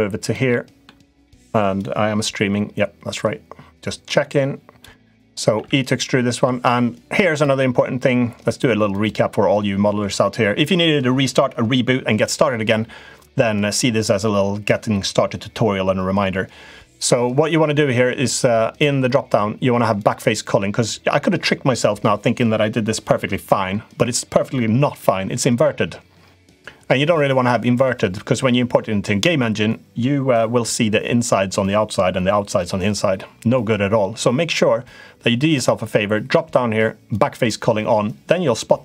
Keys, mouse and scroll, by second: 0.2 middle click, 1.6-4.6 drag, 4.9 middle click, 5.3 e, 8.8-13.3 drag, 18.0-20.5 drag, 27.7-28.8 drag, 35.3-37.2 drag.